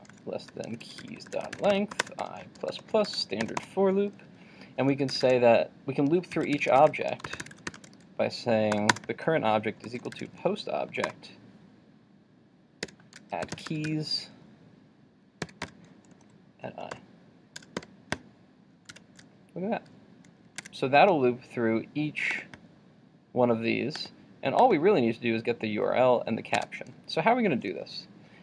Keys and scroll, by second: 18.9 super+s, 20.7 super+Tab, 26.6 super+Tab.